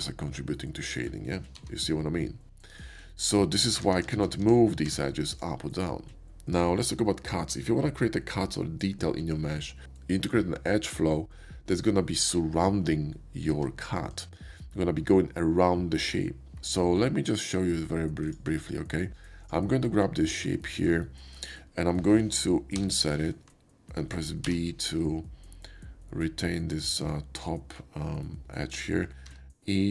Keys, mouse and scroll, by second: 1.5 g, 2.7 click, 4.0 ctrl+z, 4.2 ctrl+z, 4.4 ctrl+z, 4.8 Tab, 5.2 click, 13.5 Tab, 14.1 click, 24.4 b, 26.8 shift+click, 29.2 e.